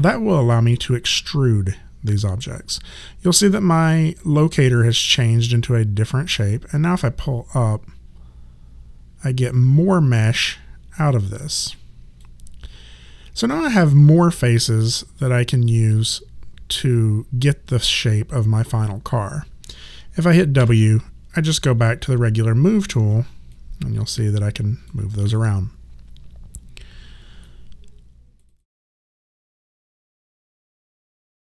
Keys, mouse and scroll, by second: 7.0 click, 20.6 w, 22.1 alt+click, 25.2 ctrl+z, 27.4 right click.